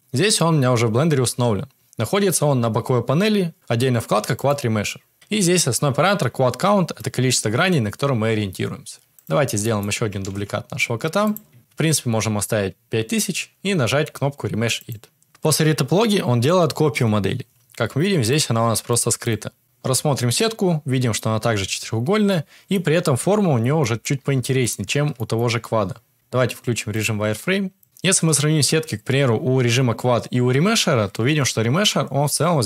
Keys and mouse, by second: 1.2 n, 9.1 click, 9.6 shift+middle drag, 10.1 shift+d, 14.7-15.3 drag, 18.2 click, 18.8 click, 19.6 Tab, 20.3 middle click, 22.2 middle click, 23.7 shift+middle click, 24.3 Tab, 24.7 Tab, 25.1 middle click, 26.1 Tab, 26.9-27.8 drag.